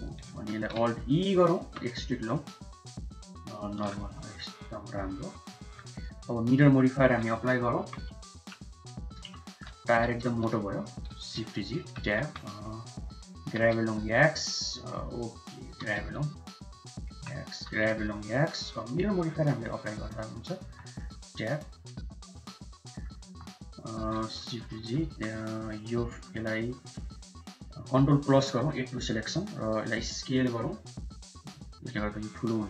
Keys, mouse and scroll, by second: 0.1 middle click, 1.5 alt+e, 3.9 Tab, 4.2 click, 4.4-4.9 middle drag, 5.5 middle click, 6.1 middle click, 8.3 KP_1, 9.3 shift+middle click, 10.9 g, 11.1 shift+z, 11.7 Tab, 12.1 1, 12.5 click, 13.4 g, 15.7 g, 17.0 Tab, 17.5 g, 19.2-20.2 drag, 20.6 Tab, 20.8-21.3 middle drag, 22.4 KP_Divide, 22.8 middle drag, 23.1 Tab, 23.8 middle click, 24.3 shift+z, 24.7 middle click, 25.0 3, 25.9 middle click, 28.4 ctrl+KP_Add, 30.3 s.